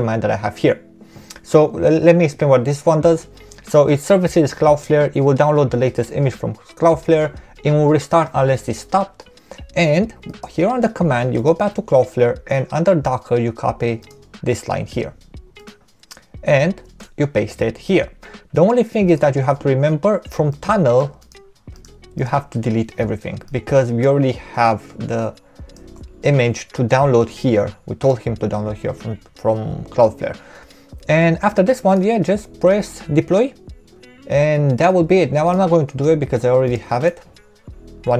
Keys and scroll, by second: 16.8 super+v, 25.8 BackSpace.